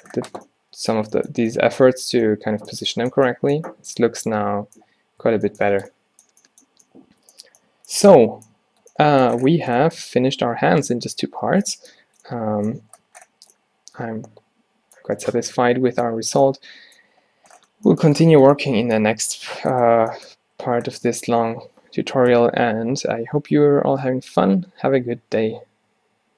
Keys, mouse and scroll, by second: 2.9-4.8 middle drag, 5.3 a, 5.8 a, 13.8-16.7 drag, 17.7-18.8 drag, 18.8 middle click, 19.8 click.